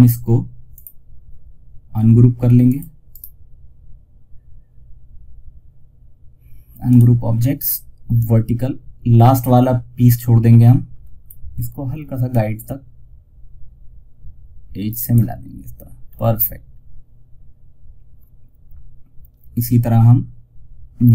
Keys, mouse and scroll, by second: 2.4 right click, 6.2-10.3 drag, 10.3 scroll up 1, 11.5-15.3 drag, 15.3 scroll down 1, 20.4-21.1 drag.